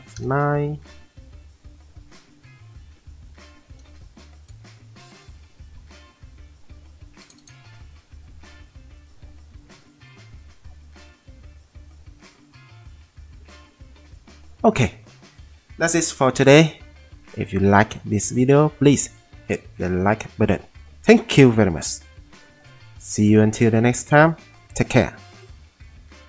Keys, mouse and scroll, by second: 0.1 F9.